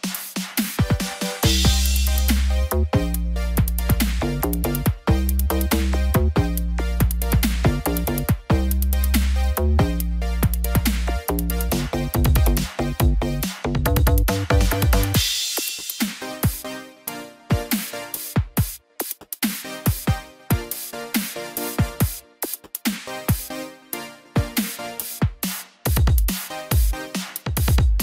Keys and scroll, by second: 14.1 ctrl+=, 21.5 ctrl+t.